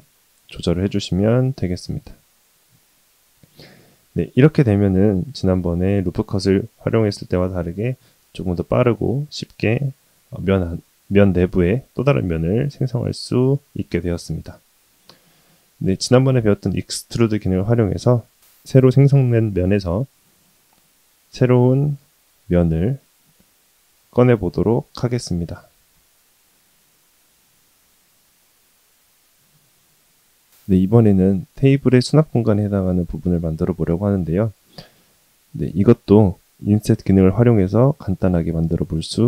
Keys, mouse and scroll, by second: 2.8-6.4 middle drag, 15.0 middle click, 15.8 shift+middle click, 18.5-19.6 middle drag, 22.2 e, 25.6-28.4 middle drag, 28.5 scroll up 2, 28.8 scroll down 1, 28.9 scroll down 1, 29.1 middle click, 36.9 click.